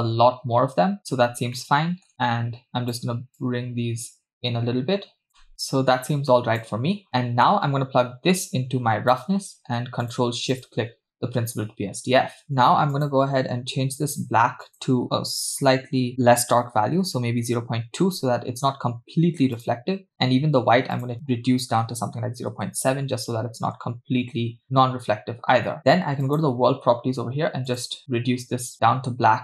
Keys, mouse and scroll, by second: 1.6 middle click, 2.7 click, 3.4-5.3 drag, 5.5 click, 7.1 middle click, 7.1-7.5 scroll down 4, 8.5-9.2 drag, 10.1 click, 10.7 ctrl+shift+click, 12.4-12.9 scroll up 5, 12.9 click, 19.6 click, 20.1 click, 26.2 click, 27.7 click.